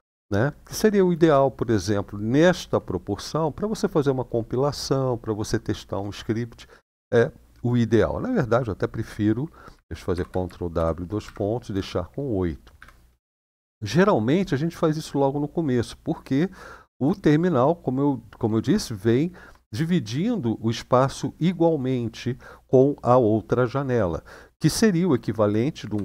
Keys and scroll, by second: 9.9 ctrl+w, 10.5 :, 11.0 Up, 11.5 BackSpace, 12.5 8, 13.0 Return, 25.7 ctrl+w.